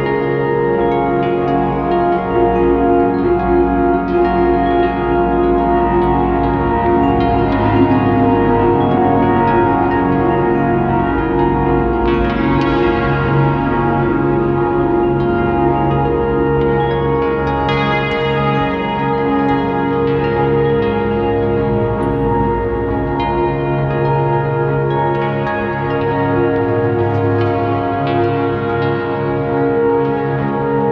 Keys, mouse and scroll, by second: 6.6 click, 8.1-9.9 drag, 11.0-14.3 drag, 12.2 scroll up 2, 15.1 alt+a, 16.6 click, 17.8 scroll down 2, 18.4 scroll up 1, 20.2 click, 22.0-26.5 drag, 23.8 scroll down 1, 24.5 s, 25.6 scroll up 1, 25.7 scroll down 1, 26.3 b, 27.9 ctrl+l, 28.1 a, 28.4 scroll up 1, 28.8 s, 30.3 click.